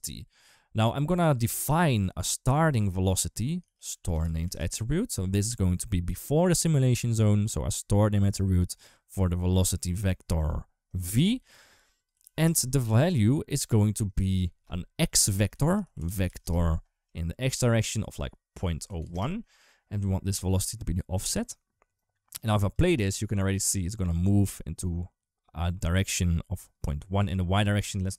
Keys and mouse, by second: 0.6 click, 3.6 shift+a, 9.4 click, 9.7 click, 10.7 click, 11.9 click, 13.4-16.9 drag, 17.4-18.9 drag, 22.3 click, 22.6 space, 24.0 space, 27.7 click.